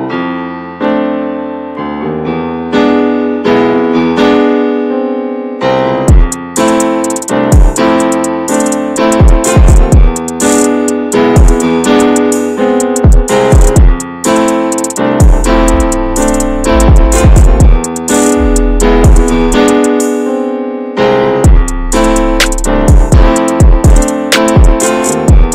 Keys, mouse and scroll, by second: 0.1-0.4 drag, 0.4-0.8 scroll down 2, 0.8 ctrl+a, 1.2 click, 1.6 Tab, 1.9 middle click, 2.6 scroll up 2, 2.8 middle click, 3.5 click, 4.6 2, 4.7 click, 6.4 x, 6.6 scroll down 2, 6.8-8.0 middle drag, 8.3 alt+shift+click, 8.9 middle click, 9.5 x, 10.1-11.4 middle drag, 11.4 click, 12.2-13.4 middle drag, 13.4 alt+shift+click, 13.7 right click, 14.5 a, 14.8 a, 15.0 right click, 15.5 scroll down 3, 15.7-17.6 middle drag, 17.6 /, 18.3 click, 18.8-19.1 scroll up 1, 19.3 Tab, 19.5 click, 20.0 /, 20.5-21.3 middle drag, 21.3 Tab, 21.6 click, 22.2 3, 22.4-23.7 drag, 23.7 x, 24.0 middle click, 24.7 scroll up 1, 24.9 middle click.